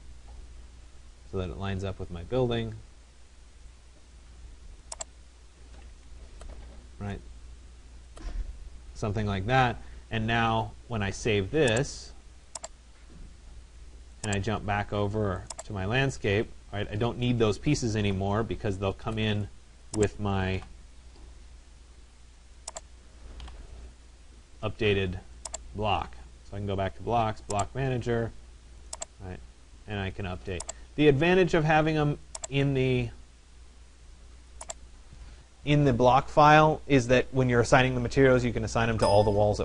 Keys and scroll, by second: 5.7 Escape, 17.8 Delete.